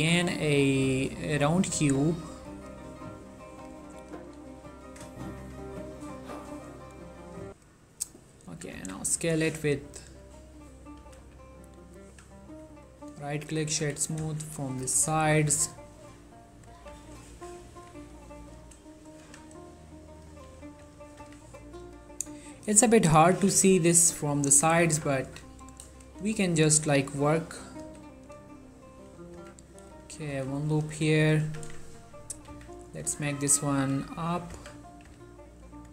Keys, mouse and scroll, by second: 0.8 click, 6.5 g, 7.6 click, 8.7 s, 8.9 z, 10.3 click, 10.7-11.1 scroll down 1, 11.1 s, 11.9 click, 12.2 g, 12.8 click, 13.1 right click, 13.5 click, 13.9-14.4 typing, 14.8 scroll up 1, 15.1 shift+middle click, 15.5 g, 16.6 click, 17.4 z, 17.9 z, 18.7 shift+middle click, 19.0-19.4 scroll up 1, 19.4 g, 20.3 click, 21.3 z, 23.3 Tab, 23.6 z, 25.7 scroll down 1, 26.1 shift+middle click, 27.0 click, 27.9 ctrl+r, 28.4 click, 29.5 z, 30.4 z, 30.8 click, 31.5 g, 32.6 z, 33.5 click, 33.9-35.2 typing, 34.5 click, 35.7 click.